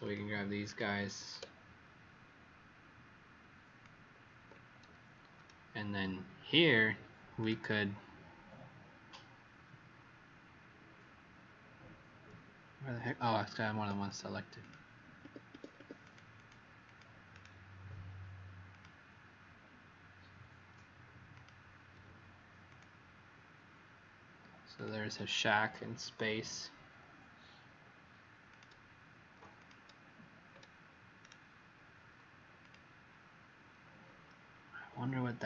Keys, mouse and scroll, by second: 0.6 click, 1.3 alt+click, 7.3 right click, 13.7 Escape, 14.5 click, 15.2 Escape, 15.4 Escape, 15.9 Escape, 15.9 click, 18.6 click, 21.2 alt+click, 22.6 click, 29.5 alt+click, 31.1 right click, 32.5 click.